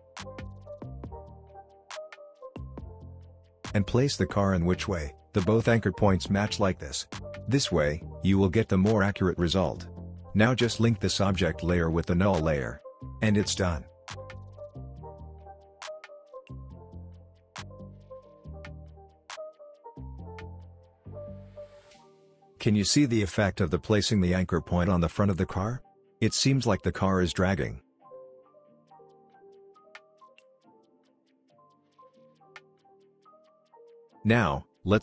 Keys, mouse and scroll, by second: 13.4-14.0 alt+scroll down 1, 14.5-15.4 click, 15.3 space, 17.3 space, 18.1-18.5 scroll up 1, 18.5 space, 18.6 click, 19.1-19.9 scroll up 1, 19.9-21.8 drag, 21.7 space, 23.6 scroll down 1, 23.9 space, 24.0 click, 25.4 space, 30.9-32.1 drag, 32.6 space, 32.9 scroll up 1, 33.1 space, 33.5 click, 33.5-34.4 space, 34.1 click, 34.4 space.